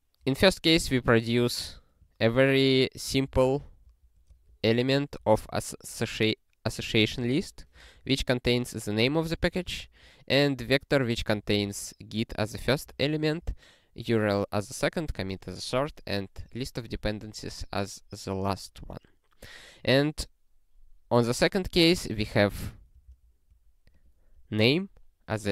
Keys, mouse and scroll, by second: 1.4 click, 3.4 ctrl+g, 3.8 ctrl+a, 7.8 alt+f, 16.8 click, 22.2 click, 22.6 ctrl+a, 22.9 ctrl+space, 23.1 ctrl+e, 23.9 click.